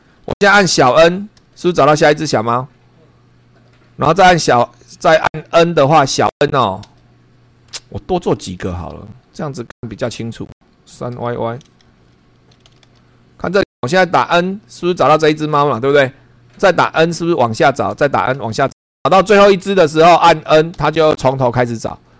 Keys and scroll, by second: 0.0 super+3, 1.4 n, 6.8 n, 8.6 Escape, 8.7 Down, 10.6-11.6 typing, 11.8 Down, 12.8 p, 13.5 Up, 14.8 n, 17.0 n, 17.9 n, 20.7 n.